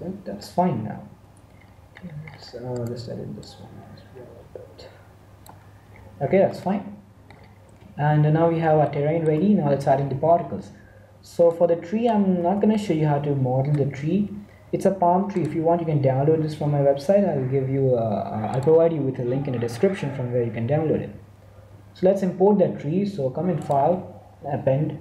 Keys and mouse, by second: 0.4 middle click, 1.3 Tab, 1.5 middle click, 3.3 middle click, 3.4-5.1 drag, 3.4-4.4 right drag, 5.8 Tab, 5.8-8.3 middle drag, 8.7 middle click, 11.0 2, 11.7-16.1 middle drag, 23.5 click.